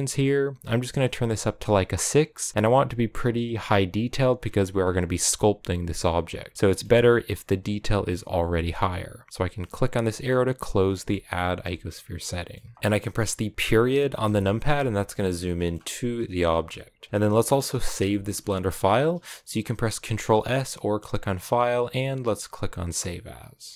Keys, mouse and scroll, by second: 4.2-6.5 scroll up 12, 6.5-9.3 shift+middle drag, 10.4 click, 10.9-12.7 shift+middle drag, 12.7-14.0 scroll down 2, 14.0 KP_Decimal, 14.8-15.2 scroll down 4, 15.2 middle click, 16.1 KP_Enter, 17.1 KP_Decimal, 17.9-20.9 middle drag, 20.9-23.7 drag.